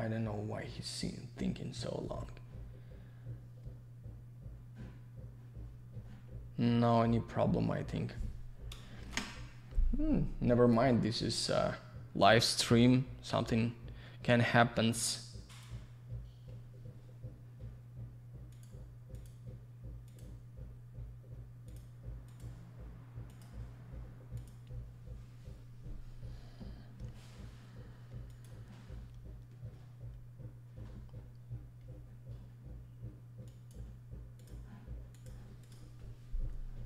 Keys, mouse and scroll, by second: 9.1 ctrl+shift+Escape, 33.5 click, 34.4 click, 34.5 click, 35.1 click, 35.2 click, 35.6 click, 35.7 click.